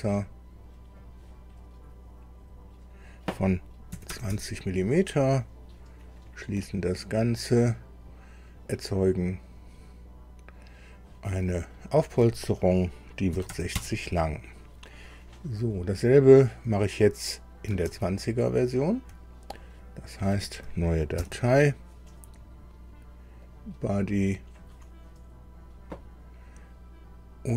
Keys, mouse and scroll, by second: 0.2 click, 1.0 click, 2.4 click, 3.9 KP_2, 4.1 KP_0, 4.3 KP_Enter, 6.2 click, 9.5 click, 13.3 KP_6, 13.5 KP_0, 13.8 KP_Enter, 18.0 alt+Tab, 21.2 ctrl+n, 23.4 click, 24.2 click.